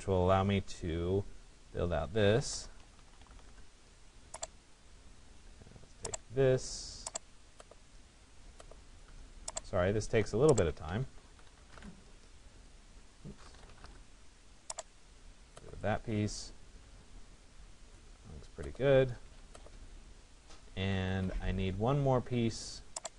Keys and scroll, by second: 3.0 Return, 11.3 Return, 18.8 Escape.